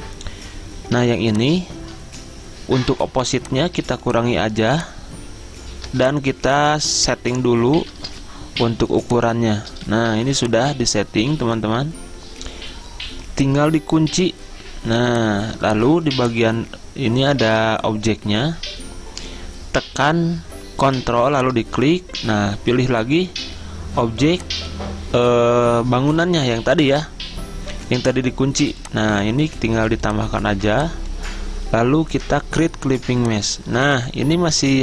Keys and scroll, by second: 8.4 Return, 8.9 z, 10.0 v, 17.7 ctrl+z.